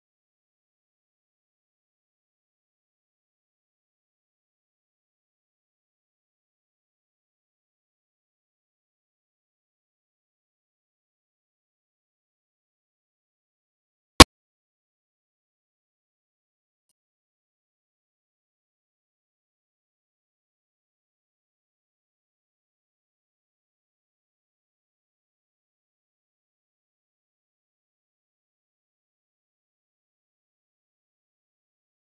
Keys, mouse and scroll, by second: 0.0 ctrl+z, 0.3 ctrl+z, 0.6 Tab, 0.8 s, 1.5 KP_0, 1.7 s, 3.0 n, 3.1 z, 3.5 n, 5.8 z, 6.4 middle drag, 6.5 scroll down 9, 6.7 middle drag, 6.9-8.2 drag, 8.2 \, 8.3 middle click, 8.4 scroll up 5, 8.5 middle click, 8.7 z, 9.7 KP_0, 11.2-21.9 drag, 21.9 z, 22.6-23.8 drag, 23.8 middle click, 23.9 scroll up 11, 24.1 middle click, 24.3 z, 25.8 click, 27.8 z, 28.3-29.7 drag, 29.9 click, 30.9-32.1 drag.